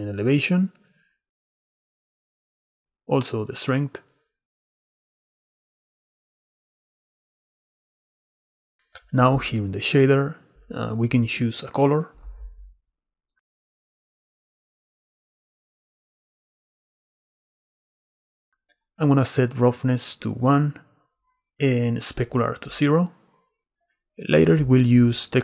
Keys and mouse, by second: 3.6-4.8 drag, 5.7-7.1 shift+drag, 9.6 click, 10.7 click, 11.7 click, 18.8 click, 19.9 middle click, 22.2 click, 23.0 click.